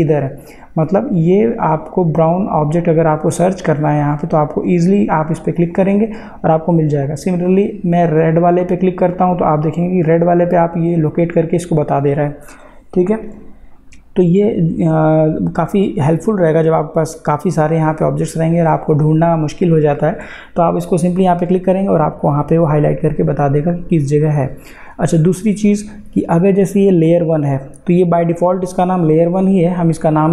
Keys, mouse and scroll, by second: 4.4 click, 5.6 click, 9.1 click, 21.2 click, 27.0 click.